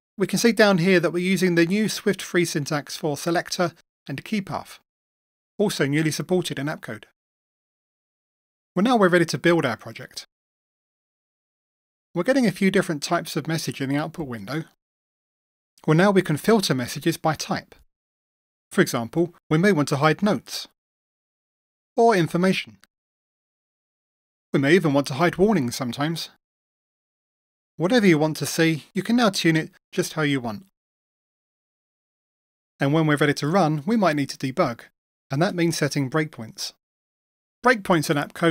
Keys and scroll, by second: 8.8 super+F9, 10.0 super+F9.